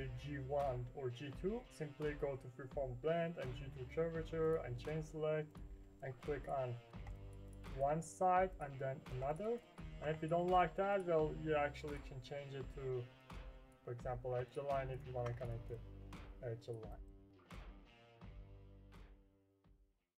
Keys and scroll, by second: 19.3 Print.